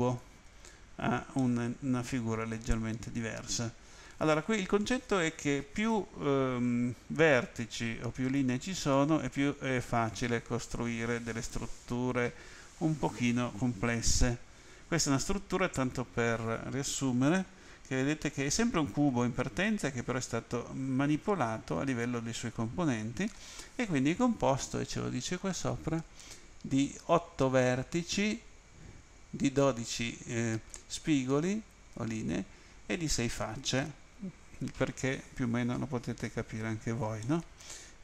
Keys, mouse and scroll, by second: 1.4 middle click, 14.2 middle click, 17.4 shift+middle click, 37.2 middle click.